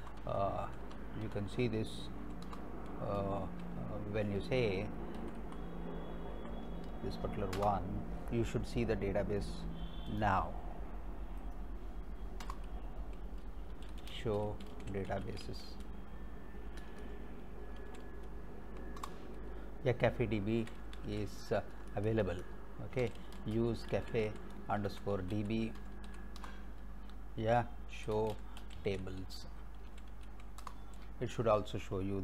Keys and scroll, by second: 0.0 Up, 0.7 Down, 2.1 l, 2.5 Return, 5.2 Up, 7.6 Return, 12.4 Return, 13.5-18.7 typing, 19.0 Return, 20.3-21.6 typing, 22.8-26.1 typing, 26.4 Return, 27.8-30.8 typing.